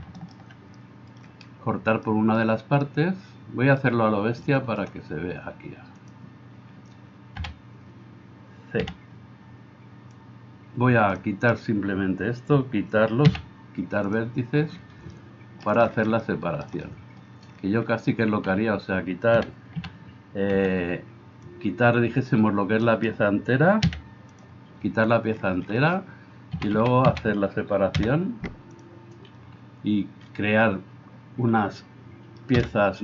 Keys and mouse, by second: 7.4 a, 8.8 c, 11.3-33.0 middle drag, 13.2 x, 19.3 a, 19.8 a, 20.6 c, 23.9 x, 26.5 a, 26.8 a, 27.1 a, 27.9 p, 32.6 p.